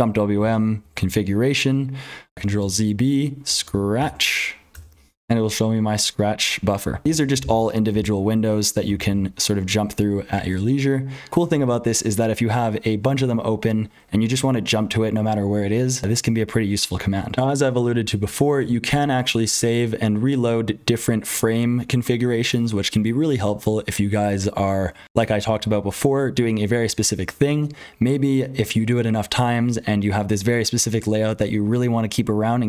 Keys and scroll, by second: 0.0-32.6 typing, 4.7 Return, 7.0 super+n, 7.2 super+n, 7.4 super+n, 7.8 super+n, 8.8 super+p, 9.0 super+p, 17.3 F12.